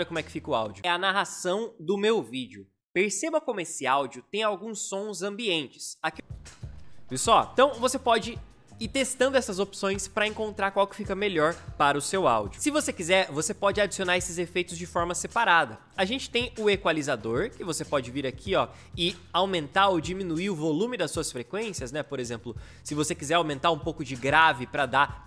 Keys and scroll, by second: 0.7 space, 6.0 space.